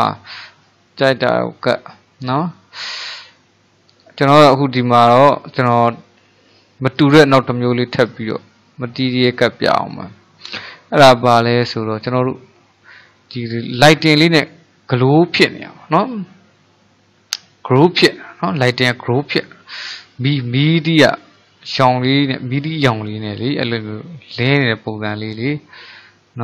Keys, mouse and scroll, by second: 2.9 scroll down 1, 3.2-4.6 middle drag, 4.6 click, 5.1-9.1 middle drag, 9.5-14.8 middle drag, 16.2-21.3 middle drag, 21.8-26.4 middle drag.